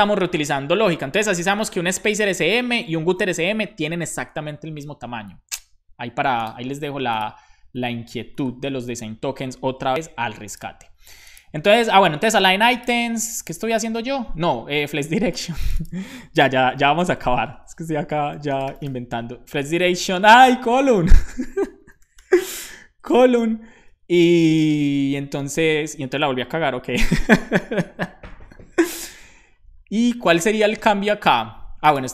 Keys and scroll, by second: 16.2-17.8 typing, 17.8 Right, 17.9 Right, 20.2 alt+shift+Left, 20.4-23.9 typing.